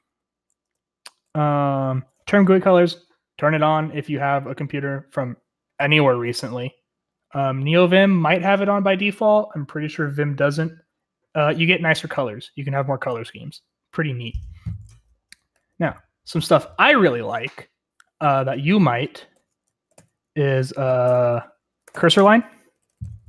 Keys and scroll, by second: 0.0-2.0 typing, 14.9-17.8 typing, 19.3 :, 19.8 ctrl+x, 19.9 ctrl+l, 21.0 typing, 21.8 ctrl+r, 22.1 ctrl+l, 22.1 Return, 22.7-23.2 typing.